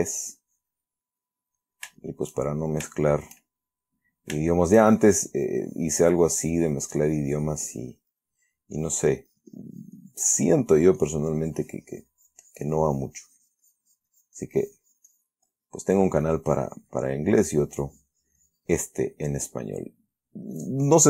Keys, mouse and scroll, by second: 0.6 click, 1.4 middle click, 1.9 shift+middle click, 2.3 shift+middle click, 2.8-3.8 shift+middle drag, 4.4-5.2 shift+middle drag, 5.3-8.9 shift+drag, 8.6 middle click, 9.1-10.8 drag, 10.8-11.2 middle drag, 11.3-15.7 drag, 15.8-16.3 middle drag, 16.6-20.7 drag, 19.6-20.7 middle drag, 20.9-21.0 drag.